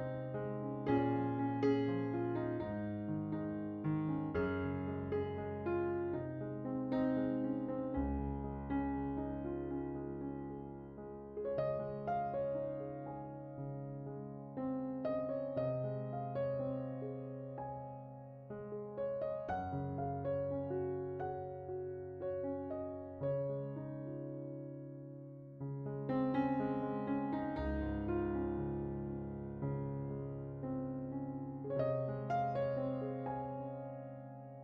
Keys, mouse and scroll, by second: 2.2 middle click, 2.8 click, 5.4 click, 7.8 shift+click, 9.4 shift+d, 11.8 scroll down 7, 12.0-12.4 middle drag, 12.5 click, 13.1-14.0 scroll up 8, 13.2 middle click, 14.6 middle click, 15.2 click, 18.7 click, 20.1 ctrl+shift+click, 22.0-25.1 drag, 25.8 click, 28.6 scroll down 7, 28.9 middle drag, 29.3 click, 29.9 right click, 31.6 click, 32.8 shift+a.